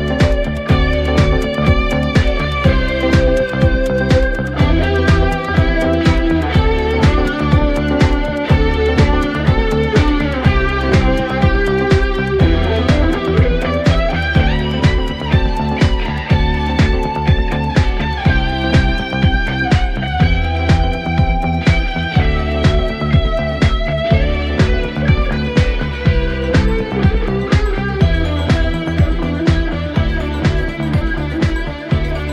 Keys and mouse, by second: 0.5 middle click, 3.8 middle click, 5.0 middle click, 5.3 middle click, 6.0 middle click, 6.5 middle click, 7.0 middle click, 7.6 middle click, 8.7 middle click, 9.3 middle click, 9.8 middle click, 10.2 middle click, 11.0 middle click, 12.2 middle click, 12.8 middle click, 13.2 middle click, 13.5 middle click, 13.8 middle click, 14.7 middle click, 15.0 middle click, 17.9 middle click, 18.6 middle click, 19.3 middle click, 19.7 middle click, 20.1 middle click, 23.7 middle click, 24.0 middle click, 24.5 middle click, 25.4 middle click, 26.0 middle click, 26.8 middle click, 32.0 middle click.